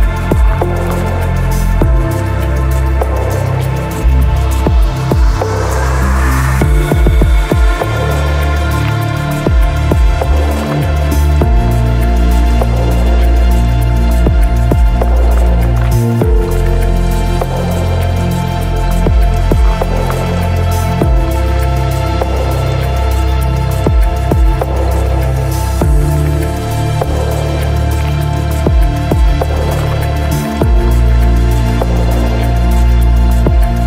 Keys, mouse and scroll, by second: 0.0-0.3 typing, 0.1 ctrl+middle click, 0.8 ctrl+shift+middle click, 1.1 shift+click, 1.5 shift+click, 2.5 shift+click, 3.8 click, 9.0 middle click, 11.7 middle click, 12.1 click, 13.3 click, 17.3 click, 18.8 click, 20.1 middle click, 20.6-21.8 drag, 21.9 click, 22.7-33.8 drag.